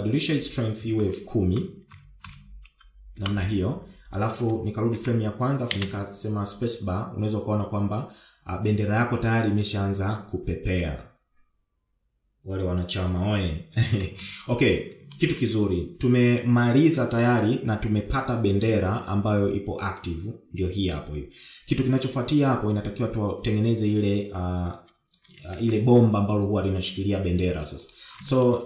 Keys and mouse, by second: 0.5-4.8 drag, 2.8 0, 5.9 shift+Left, 6.6 space, 15.0 space, 16.1 shift+middle click, 26.5 shift+Left.